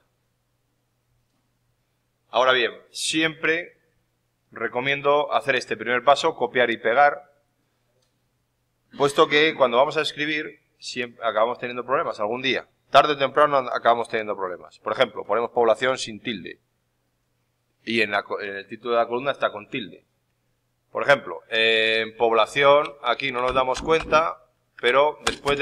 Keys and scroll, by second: 23.4 ctrl+Up, 24.6 F2, 25.1 space.